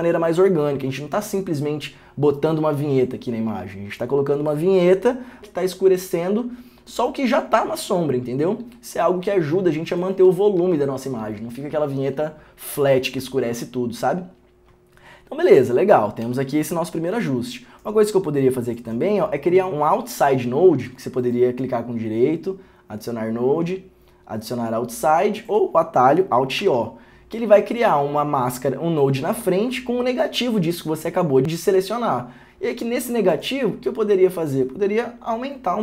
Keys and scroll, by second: 10.4 ctrl+d, 10.8 ctrl+d, 16.1 ctrl+d, 16.4 ctrl+d, 26.8 alt+o.